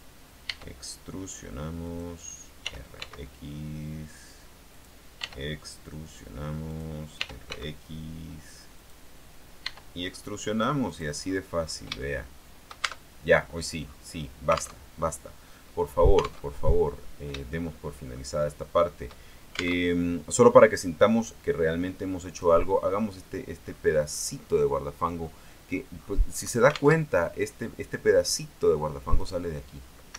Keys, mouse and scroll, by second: 0.0 click, 0.6 e, 2.0 click, 2.8 r, 3.1 x, 4.9 click, 5.3 e, 6.9 click, 7.3 r, 7.6 x, 8.9 click, 9.8 e, 11.0 click, 11.3-12.0 scroll down 1, 12.1 shift+middle click, 13.0 shift+Tab, 13.6-13.9 scroll up 1, 14.0 scroll down 1, 14.9 alt+Tab, 16.6 alt+Tab, 17.0-17.7 alt+scroll down 1, 17.7 shift+middle click, 18.6 shift+middle click, 19.9 alt+Tab, 21.4-22.7 drag, 23.2-23.9 scroll down 1, 23.9-24.6 scroll up 1, 25.2-25.5 scroll up 1, 26.1-26.8 scroll down 2, 27.1 alt+Tab, 29.3 right click.